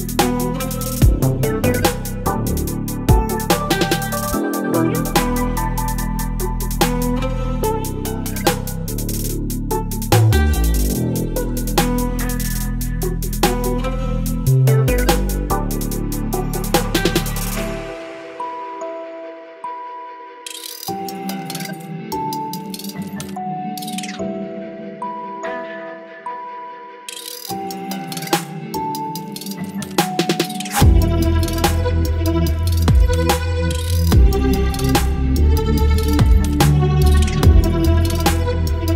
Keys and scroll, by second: 1.3 Return, 11.6 space, 18.5 Return, 20.2 ctrl+t, 28.1 Return, 30.0 space, 32.7 ctrl+t.